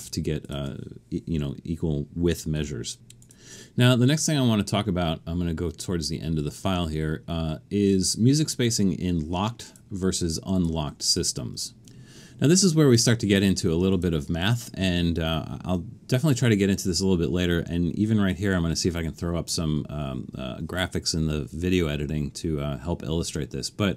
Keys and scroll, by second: 2.6 4.